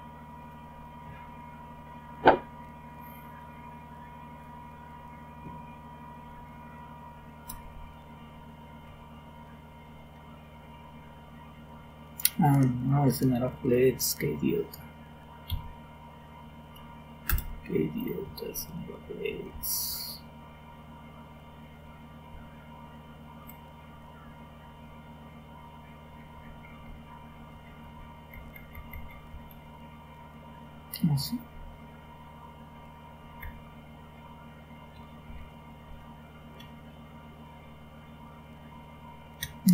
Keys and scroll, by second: 6.2 ctrl+o, 7.4 Return, 8.8 ctrl+x, 15.4 Up, 17.2 Return, 18.1 Down, 19.0 Page_Down, 19.2 Page_Down, 19.5 Page_Down, 19.6 Page_Down, 20.5-22.2 Page_Down, 22.2-28.3 Up, 28.3 Down, 28.5 Down, 28.7 Down, 28.9 Down, 29.0 Down, 29.5 Down, 33.2 Down, 35.2 ctrl+o, 35.8 Return.